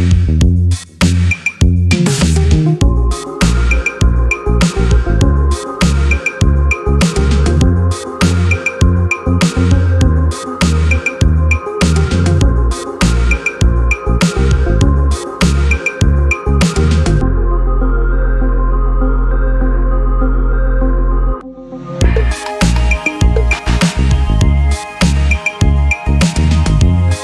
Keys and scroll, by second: 7.8 w.